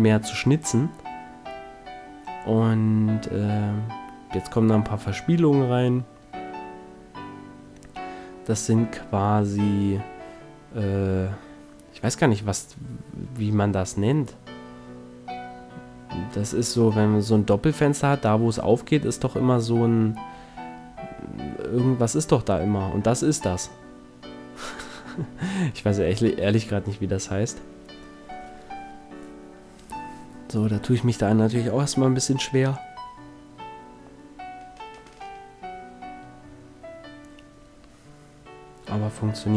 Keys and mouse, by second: 0.4 KP_1, 0.9 s, 3.8-5.2 drag, 4.6 ctrl+r, 6.4 ctrl+z, 6.8 ctrl+z, 7.3 ctrl+z, 8.4 ctrl+r, 9.8-11.2 drag, 11.2 ctrl+r, 11.6-13.2 middle drag, 14.0 z, 14.8 c, 18.1 ctrl+Tab, 19.0 a, 19.4 c, 22.8-24.4 right drag, 22.8 s, 27.0 click, 27.2 s, 28.1 middle click, 29.0 s, 34.2-35.8 drag, 35.8 middle click, 36.2 click, 37.1 ctrl+r, 39.4 click.